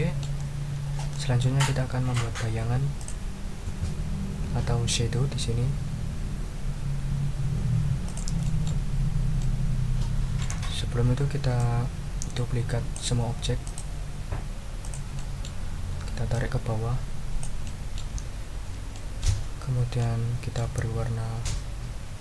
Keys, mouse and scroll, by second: 0.2 click, 1.1 ctrl+click, 3.0 click, 8.0 click, 8.4 ctrl+click, 8.9 ctrl+scroll down 2, 9.4-10.6 ctrl+middle drag, 11.6-13.1 drag, 13.6 right click, 14.8 click, 15.1 middle click, 16.3-17.6 ctrl+drag, 17.6 ctrl+middle click, 18.2 ctrl+scroll up 2, 18.9 ctrl+scroll up 2, 19.1 ctrl+click, 20.0 ctrl+click.